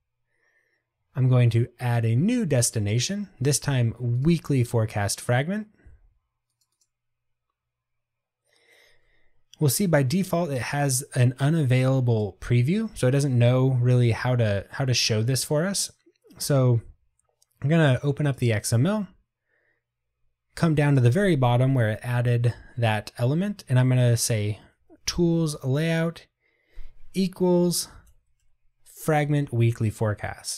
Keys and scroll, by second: 25.7 Tab, 29.7 Return.